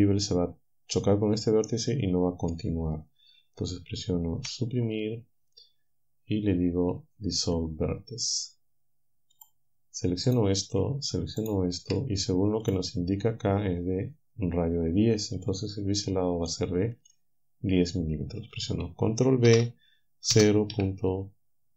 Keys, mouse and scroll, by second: 4.4 Delete, 7.5 click, 9.4 click, 10.3 click, 11.4 shift+click, 12.7 click, 15.4 click, 16.5 click, 17.1 middle click, 19.5 b, 20.3 0, 20.7 ..